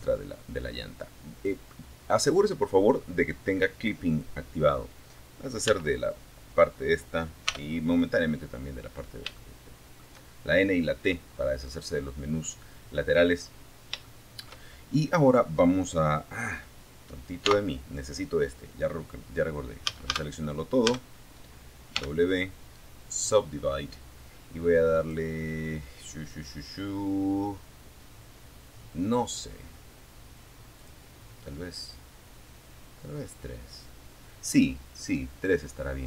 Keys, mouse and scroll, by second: 1.9 click, 3.8 n, 5.6 t, 6.5 scroll down 2, 7.2 scroll down 3, 7.6 shift+middle click, 12.2 shift+middle click, 12.9 shift+scroll up 2, 15.6 t, 18.0 a, 19.0 a, 20.2 w, 21.4 click, 23.2 click, 29.0 click, 35.6 click.